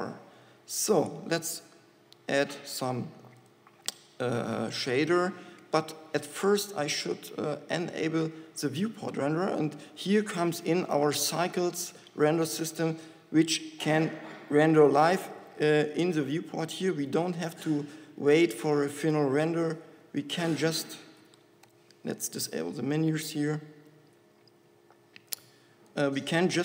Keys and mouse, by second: 8.4-9.7 drag, 14.2-16.2 typing, 17.5 z, 19.9 n, 20.7 f, 21.5 n, 21.9 t, 25.6 click.